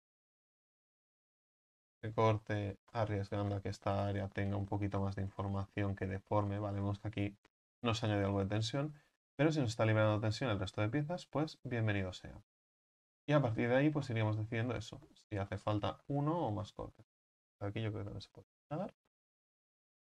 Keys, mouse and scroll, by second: 0.9 u, 12.7 middle click, 13.1-13.7 scroll up 3, 13.7 right click, 14.1-15.2 middle drag, 15.2 scroll up 3, 15.7 right click, 16.1-17.1 middle drag, 17.1 ctrl+right click, 19.7 u.